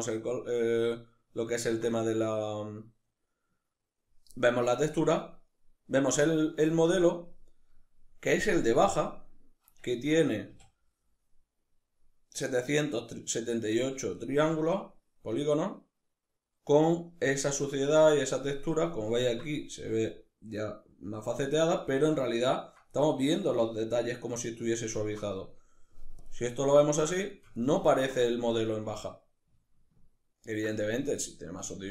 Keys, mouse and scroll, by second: 9.3 Tab, 9.9 a, 13.7 Tab, 25.5 drag, 26.1-31.9 ctrl+middle drag.